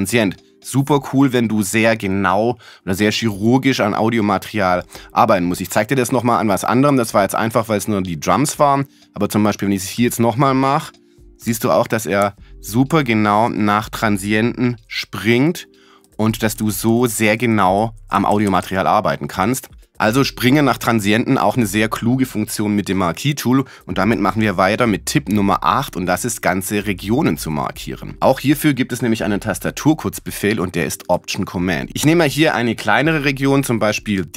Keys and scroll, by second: 11.0 Right, 17.5 Left.